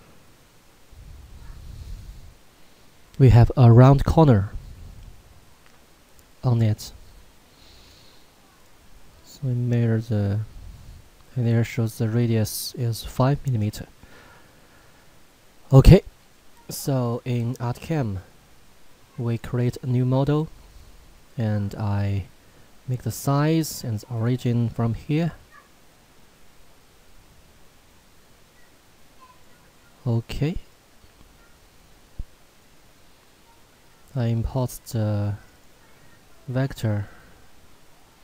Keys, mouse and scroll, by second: 7.7 scroll up 1, 7.8 click, 17.5 click, 24.1 click.